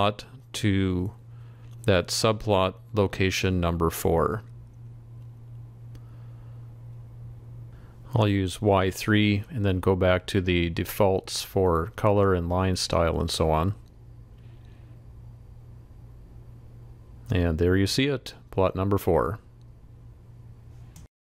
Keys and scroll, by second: 2.2 ctrl+c.